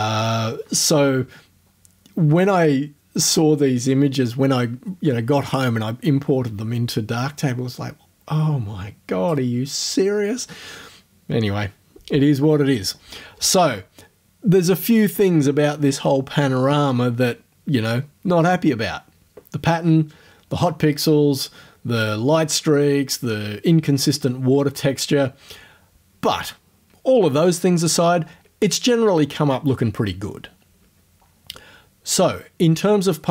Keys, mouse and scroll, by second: 17.8-18.2 scroll down 2.